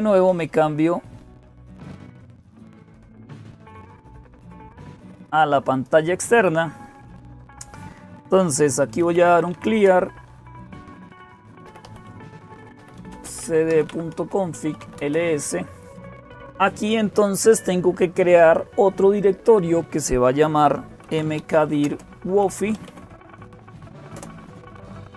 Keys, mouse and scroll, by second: 0.0-25.1 typing, 1.8 click, 4.4-5.4 drag, 12.1 Return, 23.9 Return.